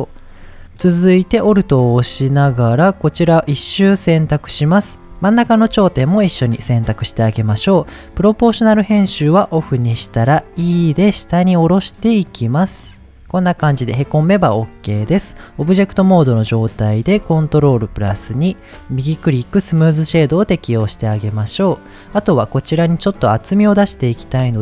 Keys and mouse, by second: 1.4 Tab, 2.6 alt+click, 5.3 shift+click, 8.5 click, 9.6 middle click, 10.3 e, 13.1 Tab, 13.6-14.5 middle drag, 17.7 ctrl+2, 18.9 right click, 21.0-21.7 middle drag, 23.8 middle click.